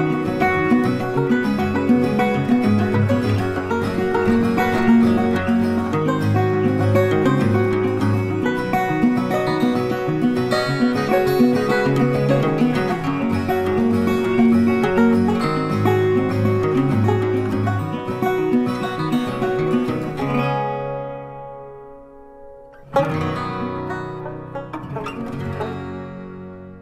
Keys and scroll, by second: 16.5 ctrl+8, 16.8 ctrl+f.